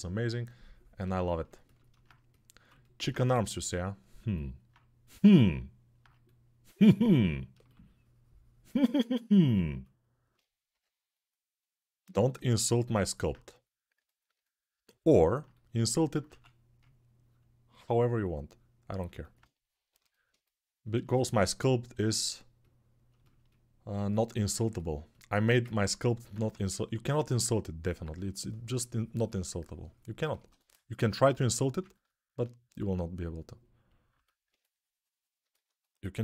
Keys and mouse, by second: 3.1 g, 10.5 g, 12.4-35.4 ctrl+alt+shift+drag, 16.1 1, 26.1 1, 31.3 g.